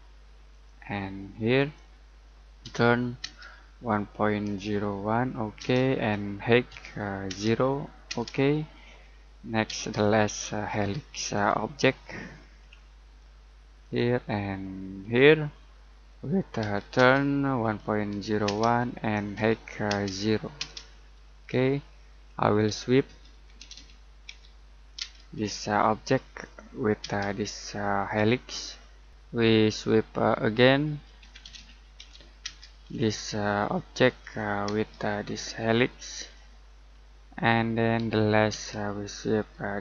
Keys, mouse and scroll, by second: 0.5 click, 2.6 t, 3.2 space, 6.7 h, 7.3 space, 8.6-9.0 scroll down 1, 9.0 middle click, 9.6 space, 9.9-11.3 scroll up 1, 11.3 click, 12.0 middle click, 12.5-13.8 scroll up 1, 13.8 click, 15.5-16.1 scroll down 1, 16.1 middle click, 16.6 t, 16.9 space, 19.3 h, 19.8 space, 21.3-21.6 scroll down 1, 22.1-23.0 scroll up 1, 22.8-25.0 typing, 25.3-26.4 scroll up 1, 26.4 click, 27.0 space, 28.4 click, 29.4-29.7 scroll down 1, 29.7 middle click, 30.6-32.4 typing, 32.9-34.2 scroll up 1, 34.2 click, 34.6 space, 36.1 click, 36.9 scroll down 1, 37.1 middle click, 37.7-38.5 scroll up 1, 38.5 space.